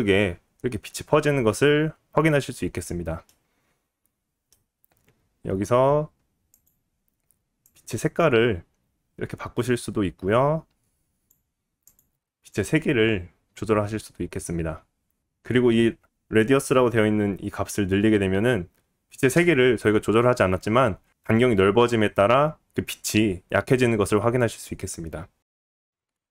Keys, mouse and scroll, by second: 6.5 click, 6.6-12.5 middle drag, 12.5-26.3 drag.